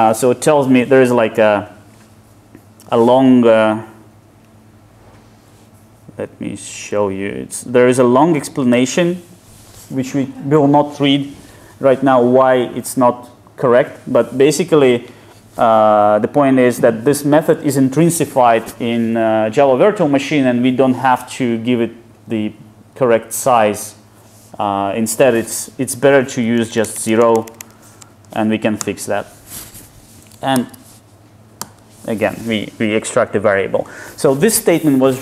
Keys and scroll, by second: 28.0 alt+Return, 30.6 alt+super+v.